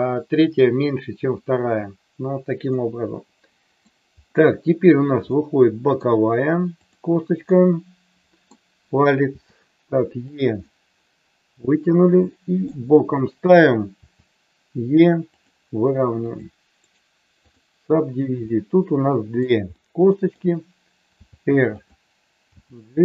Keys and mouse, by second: 2.7-3.8 middle drag, 5.3 middle click, 7.4-8.4 middle drag, 9.2 e, 10.6-12.6 middle drag, 14.0 e, 17.1-18.5 right drag, 18.5 middle click, 19.7 middle click, 21.2 r, 22.5 g.